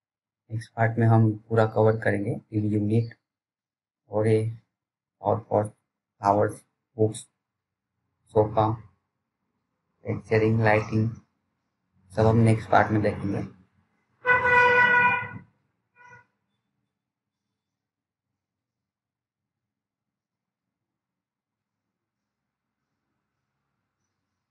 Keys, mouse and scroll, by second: 14.2 click, 15.7 right click, 16.2 click, 18.5 c.